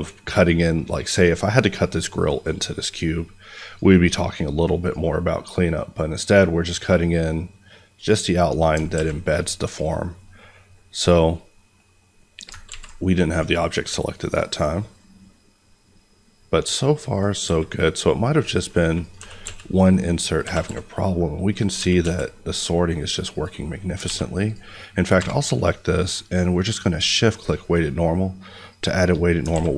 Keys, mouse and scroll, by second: 8.9 alt+a, 9.7 click, 12.6 ctrl+z, 13.3 click, 16.0-17.1 scroll, 17.1 click, 17.4 s, 18.9 click, 19.1 g, 19.4 x, 20.2 click, 20.5 g, 20.6 y, 21.4 click, 21.7 g, 22.0 x, 23.3 click, 24.0 alt+a, 24.4 click, 26.4 q, 28.6 shift+click, 29.5 alt+a.